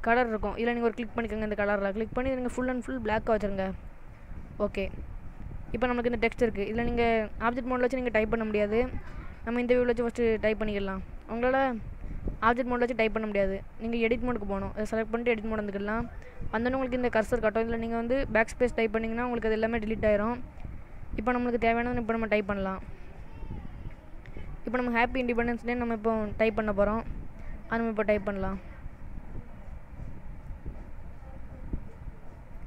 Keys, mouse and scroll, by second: 1.3 click, 4.6 middle click, 5.3-6.2 scroll up 5, 6.2 shift+middle click, 9.1 click, 14.9 click, 18.3 BackSpace, 18.5 BackSpace, 18.8 BackSpace, 19.1 BackSpace, 20.6-21.9 scroll down 2, 22.6-25.3 typing, 27.1 shift+i, 28.3 n, 29.4-32.6 typing.